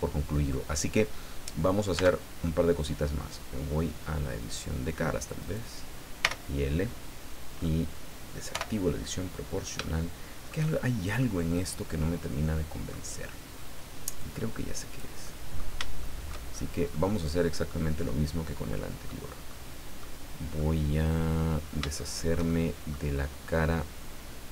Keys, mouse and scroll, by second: 0.9 scroll down 2, 1.9 Tab, 4.4 click, 5.4 middle click, 6.2 l, 8.5 o, 9.0-10.7 middle drag, 11.2-13.1 middle drag, 14.2-15.2 drag, 15.2 middle click, 16.0 shift+middle click, 16.5-16.8 shift+scroll up 1, 16.9 middle click, 18.7 middle click, 19.5 middle click, 20.6-23.1 middle drag.